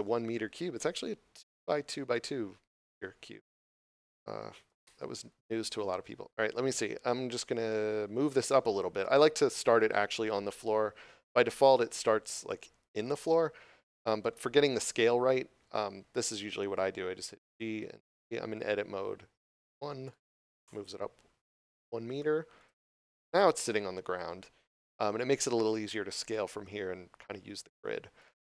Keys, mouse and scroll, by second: 2.7 middle click, 4.7 Tab, 11.4 middle click, 20.5 Return, 22.6 middle click.